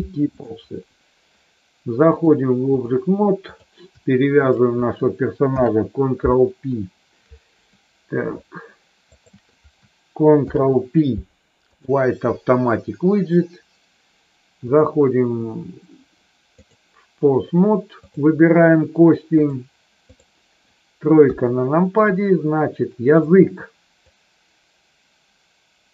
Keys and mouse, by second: 2.0 click, 4.2 shift+click, 5.4 ctrl+p, 9.1 shift+click, 10.4 ctrl+p, 14.6-16.1 drag, 19.5 click, 21.1 KP_3, 22.0-23.2 drag, 24.0-25.9 drag.